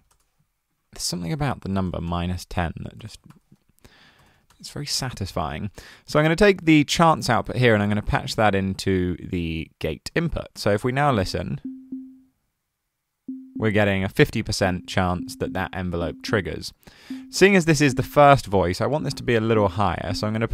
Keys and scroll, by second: 0.0-0.5 typing, 1.6-4.8 typing, 19.2-20.5 typing.